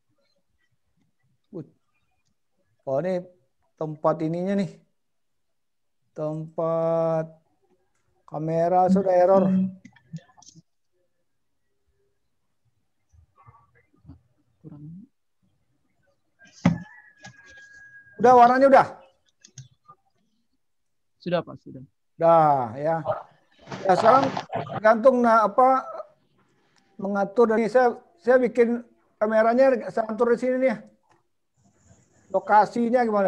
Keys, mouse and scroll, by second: 7.4 click, 7.4 scroll down 4, 15.3-15.9 scroll up 3, 16.0-16.7 scroll down 1, 16.7 scroll down 1, 20.0 click, 21.0 click, 25.3 click, 27.3 scroll down 1, 27.5 n.